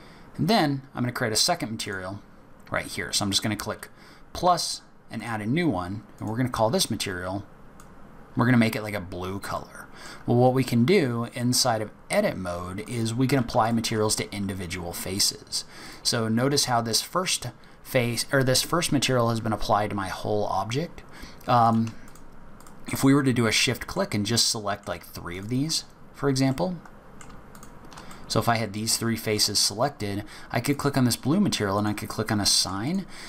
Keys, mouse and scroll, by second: 1.8 click, 5.1 click, 6.1 click, 9.6 middle click, 12.8 click, 13.6 shift+click, 15.8 click, 21.6 click, 22.0 shift+click, 22.5 click, 23.5 middle click, 24.3 middle click, 25.3 shift+click, 26.5 middle click, 27.5 shift+click, 28.1 middle click, 29.9-30.5 scroll down 1, 30.7 click, 31.7 click, 32.4 middle click, 32.8 click.